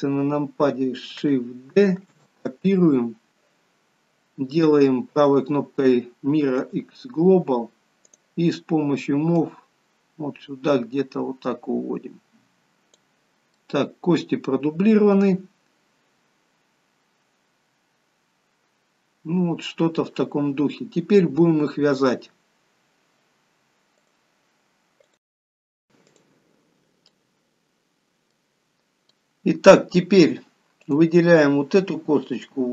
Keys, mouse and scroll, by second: 1.9 shift+d, 5.2 right click, 8.0 click, 9.3 click, 13.5 middle click, 27.0 middle click, 29.1 middle click, 30.8 click.